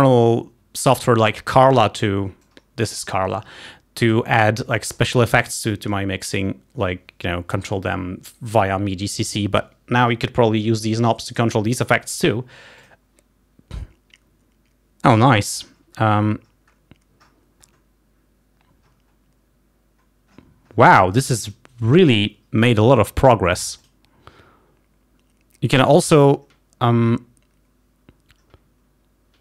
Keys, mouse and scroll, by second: 2.5-4.6 drag, 5.3 click, 13.0 click, 15.9-16.2 scroll down 2, 16.6-17.0 scroll down 2, 17.6-17.9 scroll down 2, 19.0-19.5 scroll up 2, 20.6-20.9 scroll up 2, 24.0 click.